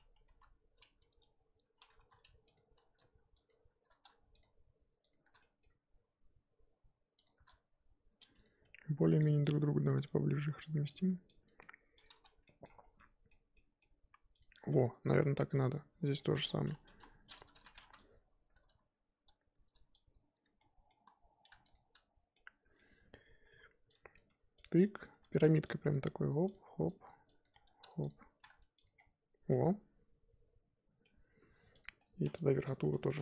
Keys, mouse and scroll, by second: 0.3 l, 1.7 scroll up 2, 2.0 3, 2.5 alt+click, 5.4 middle click, 5.6-6.3 scroll up 2, 7.2 alt+shift+click, 8.6 g, 9.9 click, 9.9 g, 11.1 click, 11.4 click, 11.6 g, 12.2 Tab, 12.4-13.0 scroll down 3, 12.4-12.8 middle drag, 13.0-14.4 middle drag, 14.4 click, 14.5 Tab, 14.9 a, 15.2 scroll up 2, 15.5 click, 16.1-16.5 middle drag, 16.5-16.9 scroll up 1, 16.9 KP_1, 17.6 z, 18.5 click, 20.6-20.9 middle drag, 20.9 z, 21.7 shift+click, 22.3-24.1 middle drag, 24.1 click, 24.3 g, 25.0 click, 25.1 g, 25.9 click, 26.0 g, 27.0 click, 27.4 click, 27.5 g, 28.4 z, 28.4 Tab, 28.8 click, 28.9-29.5 scroll down 4, 29.5-31.8 middle drag, 31.8 click, 32.0-32.4 middle drag, 32.4 Tab, 33.0 click.